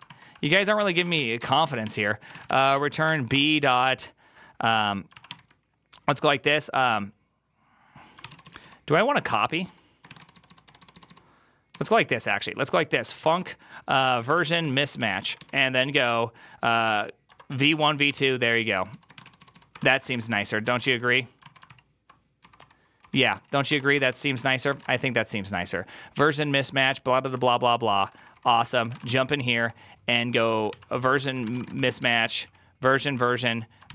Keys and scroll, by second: 0.6 ctrl+c, 0.7-3.6 typing, 4.9-5.6 typing, 8.2 ctrl+c, 8.2 ctrl+u, 8.3 ctrl+u, 8.5 ctrl+u, 9.0 ctrl+d, 9.5-25.1 typing, 21.3 ctrl+o, 21.5 ctrl+c, 23.2 ctrl+c, 27.1 Return, 27.1 ctrl+d, 27.8-29.6 typing, 30.2 Tab, 30.6 ctrl+c, 31.1 ctrl+c, 31.1-33.9 typing.